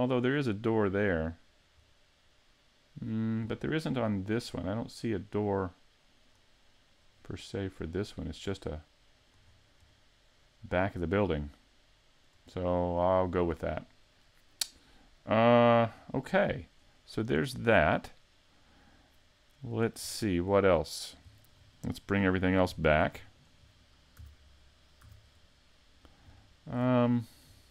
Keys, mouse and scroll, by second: 1.2-1.9 scroll down 2, 1.9 middle click, 3.5-4.0 scroll down 1, 4.0-4.5 scroll down 2, 4.5 middle click, 7.0-7.4 scroll down 2, 7.5 middle click, 8.8 middle click, 9.5-10.3 scroll up 3, 9.9 middle click, 12.5 scroll down 3, 13.0 middle click, 15.7 scroll down 1, 16.1 middle click, 16.8-18.9 scroll up 2, 17.3 middle click, 20.1 scroll down 2, 20.6 middle click, 21.4 shift+middle click, 23.4 shift+click, 24.2 a, 25.0 a, 25.3 middle click, 26.5 shift+middle click, 27.1-27.6 scroll up 1, 27.6 middle click.